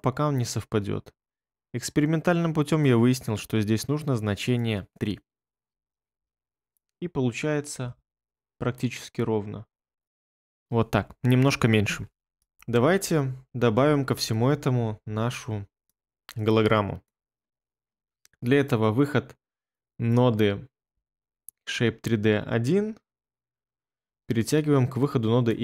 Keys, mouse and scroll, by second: 5.6 3, 6.1 Return, 12.5 ctrl+middle click.